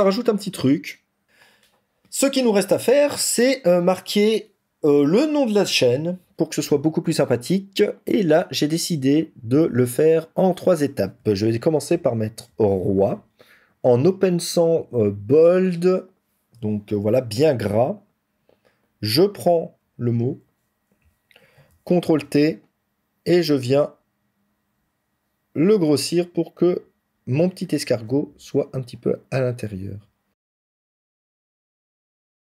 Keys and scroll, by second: 21.3 ctrl+t.